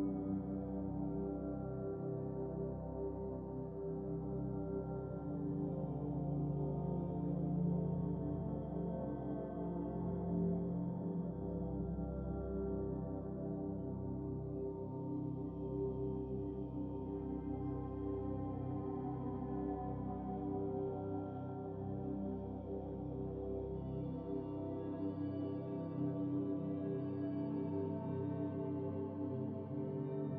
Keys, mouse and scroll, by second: 5.5 scroll down 4, 6.1 scroll up 4, 7.1 shift+right click, 7.7 shift+s, 9.4 click, 11.9 KP_0, 14.3 click, 15.6-18.3 drag, 21.2 click, 30.1 ctrl+s.